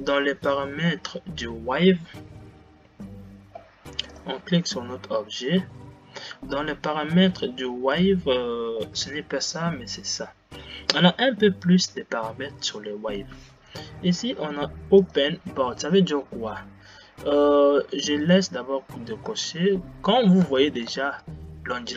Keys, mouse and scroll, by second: 5.2 click, 6.5 scroll down 7, 19.5 space, 21.1 space.